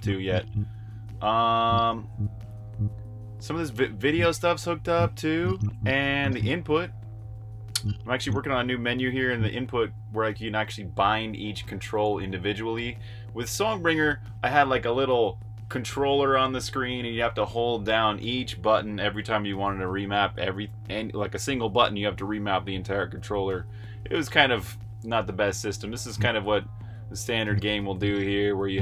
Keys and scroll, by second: 0.0-2.5 typing, 3.8-9.6 typing, 25.6-28.4 typing.